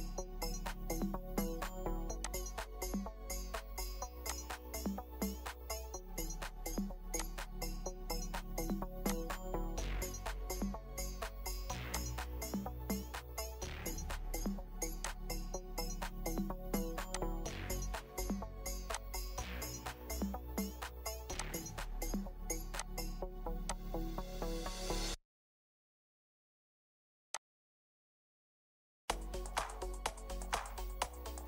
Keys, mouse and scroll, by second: 10.5-11.0 scroll up 1, 15.8-16.1 scroll down 1, 24.1-24.8 scroll up 1, 24.8-25.2 scroll down 1, 25.2-25.6 scroll up 1, 25.6-26.3 scroll down 1, 31.3 scroll.